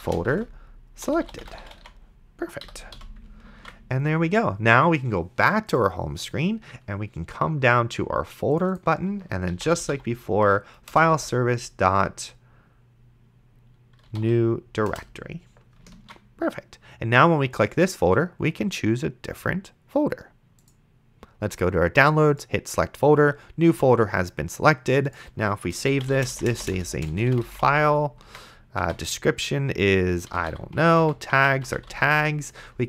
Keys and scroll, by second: 0.0-2.9 typing, 2.6 End, 3.8 ctrl+s, 9.4-11.1 typing, 10.9 Return, 13.8-14.9 typing, 16.3 ctrl+s, 25.8-28.2 typing, 28.2 Tab, 30.0-32.4 typing.